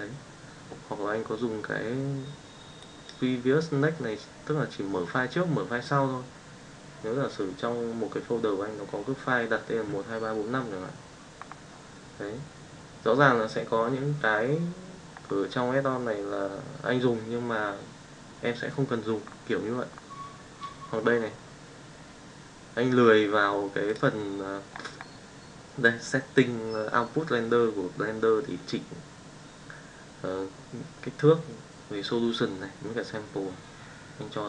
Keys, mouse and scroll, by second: 2.7 click.